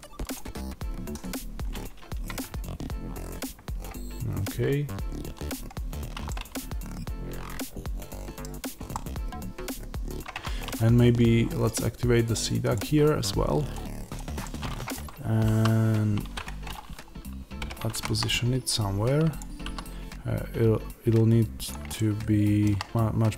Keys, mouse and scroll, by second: 0.2 click, 6.1-12.1 middle drag, 8.4-8.8 scroll down 2, 9.9-10.2 scroll down 1, 10.2 Tab, 12.1-14.3 drag, 14.3-19.2 middle drag, 15.5 s, 16.3 Escape, 16.7 scroll down 1, 17.5 g, 19.2 click, 19.5 s, 21.6 click, 21.8-23.3 shift+middle drag.